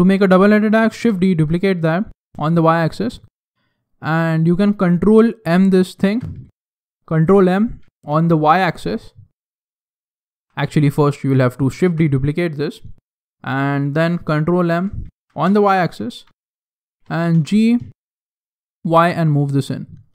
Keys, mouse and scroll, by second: 0.9 shift+d, 3.1 right click, 3.6 middle click, 5.9 ctrl+m, 10.2 ctrl+z, 11.8 shift+d, 14.6 ctrl+m, 17.0 g.